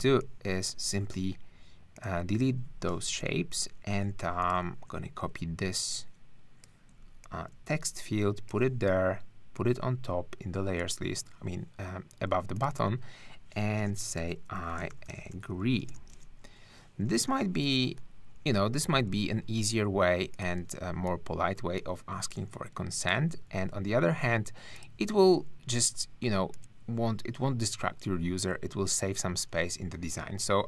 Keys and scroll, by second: 0.4 space, 3.2 shift+BackSpace, 4.3 super+BackSpace, 13.8-15.9 typing, 17.2 space, 17.6 BackSpace, 18.7 super+BackSpace, 18.8 super+a.